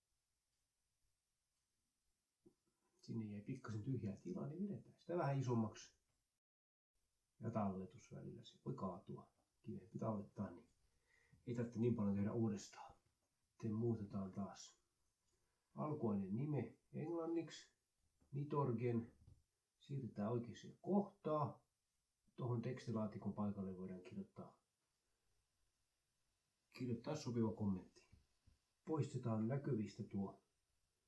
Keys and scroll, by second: 0.4 Left, 0.9 Delete, 8.0 ctrl+s, 15.2 Left, 15.2-16.5 typing, 16.9 Left, 17.7 BackSpace, 18.1 Right, 18.2 o, 18.4 Left, 19.0 BackSpace, 23.0-29.2 typing, 24.8 ctrl+Right.